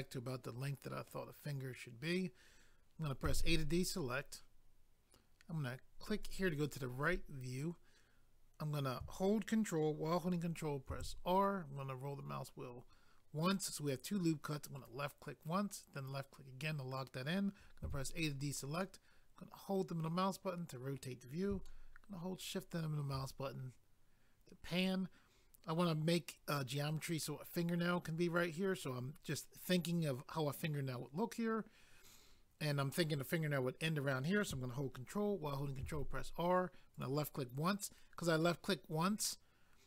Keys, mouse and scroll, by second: 0.8 middle click, 3.2 a, 6.2 click, 6.3 click, 12.2 scroll up 1, 14.8 click, 14.9 click, 16.0 click, 16.1 click, 17.8 a, 18.8 middle click, 21.7 shift+middle click, 35.8 ctrl+r, 36.9 click, 37.0 click.